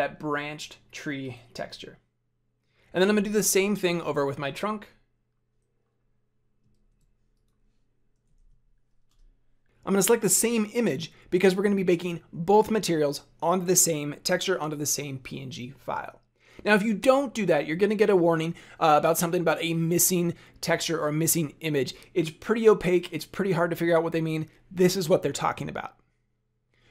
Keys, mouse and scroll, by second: 4.0 click, 6.7 shift+a.